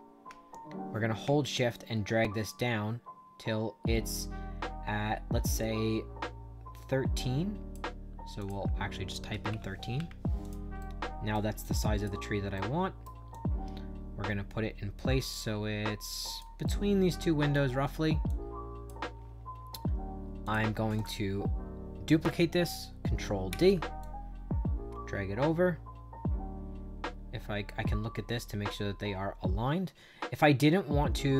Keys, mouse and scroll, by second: 1.4-7.6 shift+drag, 8.3 shift+click, 9.0-9.9 typing, 10.3 click, 10.7 right click, 11.5 click, 12.5 right click, 13.2-16.3 drag, 16.6 right click, 18.2 click, 20.3 click, 20.9 click, 23.4 ctrl+d, 23.9-31.3 drag.